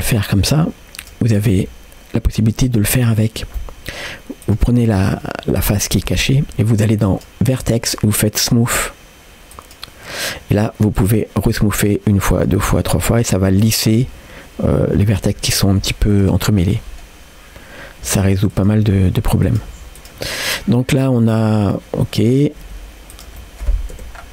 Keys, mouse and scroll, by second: 1.0 click, 1.4 g, 3.0 click, 3.6 middle click, 4.4-6.0 drag, 7.1-10.2 drag, 11.0-13.9 drag, 14.8-15.9 middle drag, 16.1 click, 16.5 middle click, 17.1 right click, 18.1 g, 18.8 r, 19.7 g, 20.3 middle click, 21.7 click, 22.2 middle click, 22.7 r, 23.4 middle click, 23.9 o, 24.2 scroll down 1.